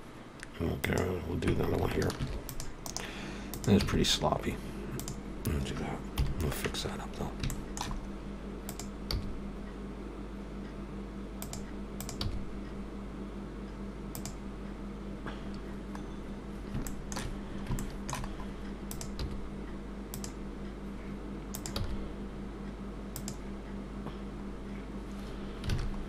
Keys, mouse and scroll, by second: 0.8 click, 2.1 ctrl+r, 3.5 click, 3.8 x, 11.4 g, 14.2 g, 15.5-16.4 scroll down 2, 16.4 scroll down 2, 16.9 shift+middle click, 17.1 scroll down 3, 17.5 scroll up 2, 17.8 shift+middle click, 18.3 scroll up 1, 18.3 scroll down 3, 18.9 click, 20.1 g, 21.5 click.